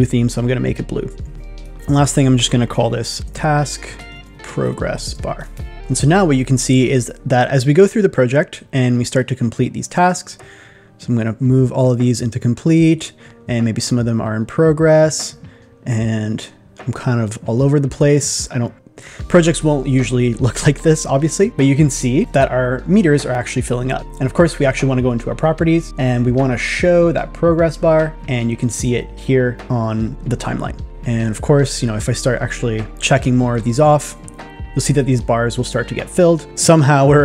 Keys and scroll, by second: 3.3 shift+t.